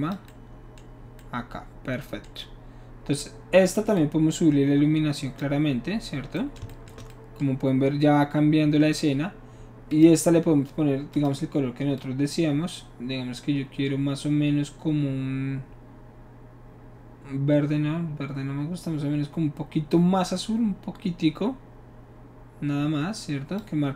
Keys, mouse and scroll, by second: 4.0-5.4 drag, 9.9 click, 11.1 click, 12.0-16.7 drag, 22.4-23.6 drag.